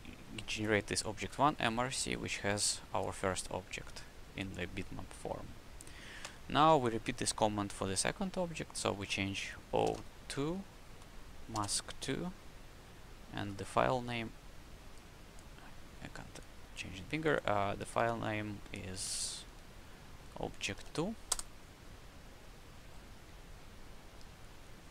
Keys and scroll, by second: 6.2 Up, 6.6 Left, 8.2 Left, 9.8 BackSpace, 9.9 2, 10.2 Right, 13.5 Right, 17.7 Right, 18.6 Left, 20.1 Right, 20.7 Delete, 20.8 2, 21.2 Return.